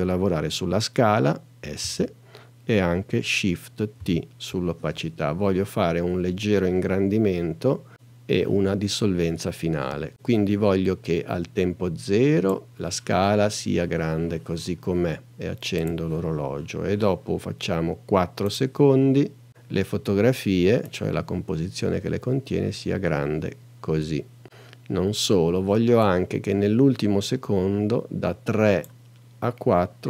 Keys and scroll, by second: 1.8 s, 2.8 shift+s, 4.0 shift+t.